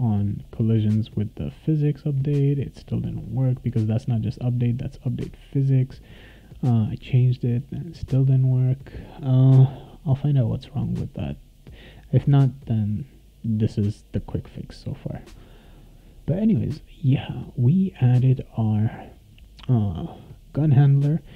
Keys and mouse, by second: 0.4 click, 3.7 click, 8.5 click, 10.6 click, 11.1 click, 16.2 click, 18.6 click.